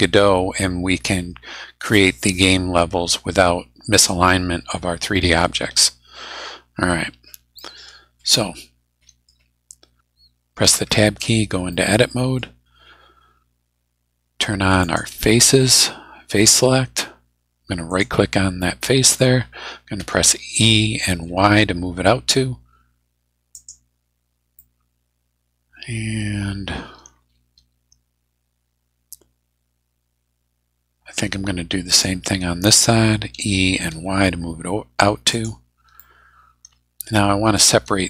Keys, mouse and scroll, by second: 6.7 scroll up 2, 7.2-7.6 scroll up 4, 7.6-9.5 middle drag, 10.7 Tab, 11.7 middle click, 14.8 click, 17.9 right click, 20.0 e, 21.1 y, 23.5 click, 24.5-28.7 middle drag, 28.7-31.3 drag, 31.9 right click, 33.3 e, 33.9 y, 35.3 click, 36.0-37.7 middle drag.